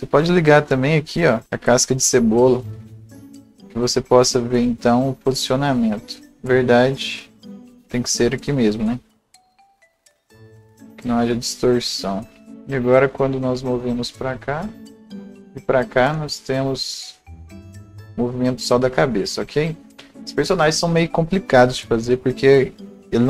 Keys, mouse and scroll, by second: 0.8 click, 1.4 scroll up 1, 4.9-11.9 drag, 4.9 scroll up 1, 10.8 scroll down 1, 11.0-12.4 right drag, 11.9-12.4 scroll up 1, 13.1 click, 13.9-23.2 drag.